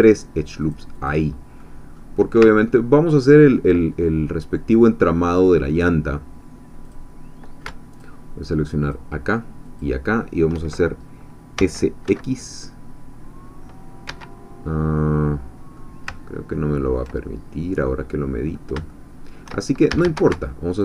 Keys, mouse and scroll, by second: 0.6-1.6 drag, 1.6 middle click, 2.4 ctrl+scroll down 2, 2.5-3.7 ctrl+middle drag, 3.7 ctrl+scroll down 2, 6.8 click, 8.0 alt+shift+click, 8.9 alt+shift+click, 9.8 alt+shift+click, 11.6 s, 12.1 x, 14.1 Escape, 14.5-14.8 scroll down 2, 15.0 middle click, 15.9 scroll down 2, 16.1-18.0 ctrl+middle drag, 18.2-18.7 scroll up 2, 18.9 shift+middle click, 19.9 shift+a, 20.7 alt+shift+click.